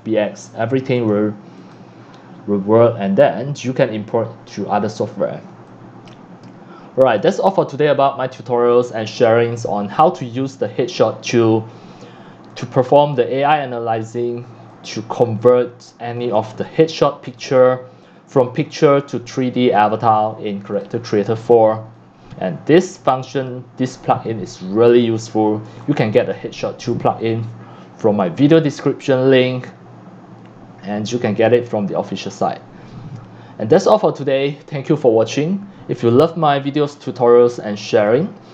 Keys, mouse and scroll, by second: 1.1 click, 2.2-7.5 drag, 7.5-9.5 drag, 9.6-11.6 middle drag, 9.6-10.1 scroll, 12.6 click, 15.5 click, 15.6 scroll, 17.4 click, 17.9 click, 19.8 click, 20.2 right click, 21.8 c, 23.8-29.4 drag, 31.6-36.7 drag.